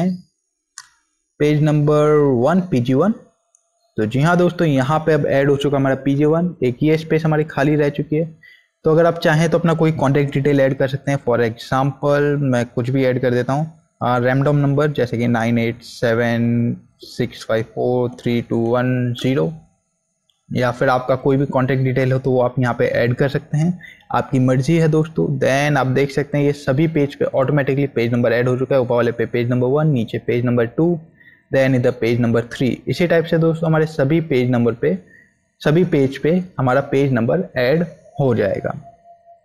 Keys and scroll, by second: 10.3 9, 10.4 1, 10.6 space, 15.0 9, 15.2 8, 15.5 7, 16.8-18.9 typing.